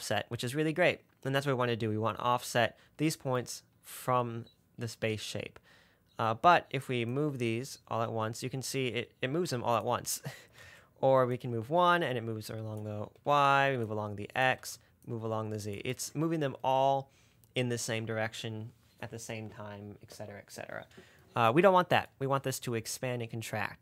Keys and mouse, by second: 7.4 click, 8.5 click, 8.7 click, 9.5 click, 10.9 ctrl+z, 11.9 middle click, 12.3 middle click, 12.7 middle click, 13.4 ctrl+z, 14.2 click, 14.9 ctrl+z, 15.5 click, 16.2 ctrl+z.